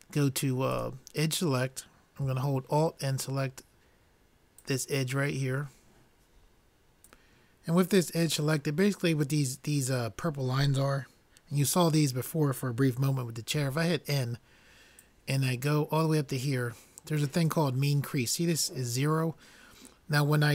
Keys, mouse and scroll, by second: 1.4-2.7 drag, 5.0-6.6 drag, 13.6 n, 15.0-16.7 drag.